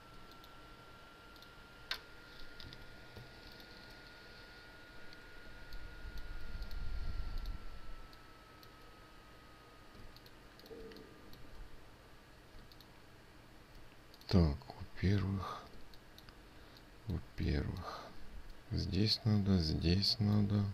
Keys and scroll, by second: 13.1 ctrl+space.